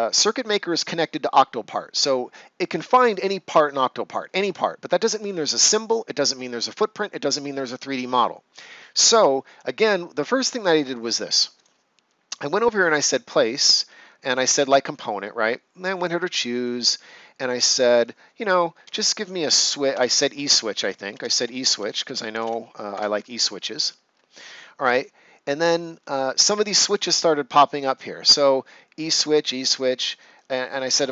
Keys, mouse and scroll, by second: 11.5 right click, 14.2 click, 18.5-22.2 typing, 22.9 Return, 30.3 click.